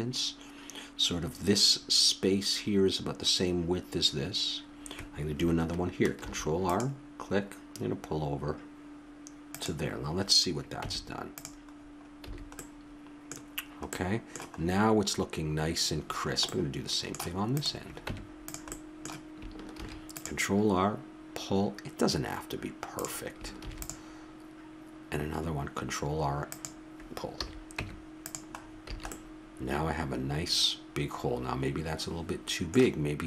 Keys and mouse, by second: 6.2 ctrl+r, 6.3 middle click, 10.8 Tab, 11.7 middle click, 12.3 a, 14.7 middle click, 15.7 middle click, 16.5-17.5 middle drag, 17.5-18.5 drag, 18.0 Tab, 19.7 ctrl+r, 23.6 ctrl+r, 27.4 a, 27.8 Tab, 28.9 a.